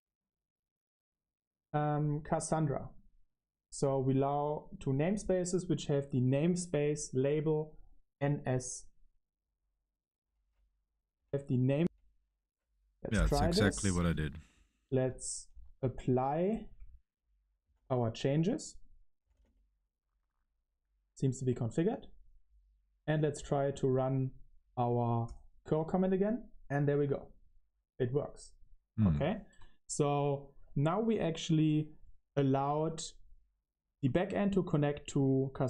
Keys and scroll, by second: 11.0 j, 11.1 Tab, 11.7 Right, 15.9-19.6 typing, 16.8 Return.